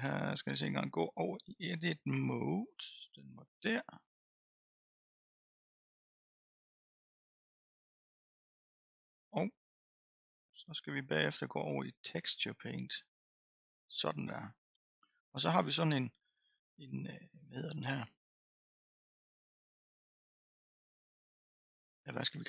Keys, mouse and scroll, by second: 2.4-5.4 drag, 5.8-6.6 middle drag, 6.6 scroll up 2, 7.2 scroll up 2, 13.0 click, 17.5-18.7 scroll up 2, 18.7-20.1 scroll down 4, 20.1-22.1 scroll up 6.